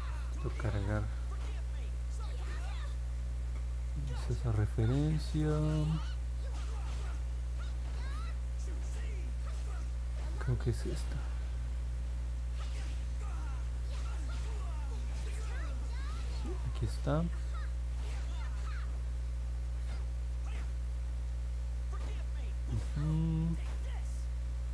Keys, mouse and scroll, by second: 2.0 click, 9.3 click, 13.1 click, 14.6 middle click, 15.4 scroll up 1, 16.1 middle click, 17.1 middle click, 19.1 middle click, 19.9 middle click, 21.0 scroll down 1, 22.0 scroll down 1, 23.0 middle click, 23.4 scroll down 1, 24.1 middle click.